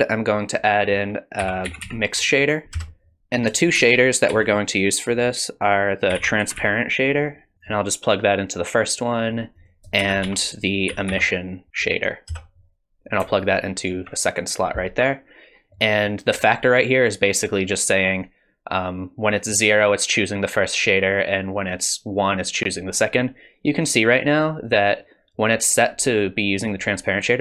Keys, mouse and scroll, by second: 3.2 BackSpace, 3.8 shift+a, 8.6 click, 9.6 click, 10.0 shift+a, 13.4 alt+right click, 17.6 click, 21.2 click, 23.8 click.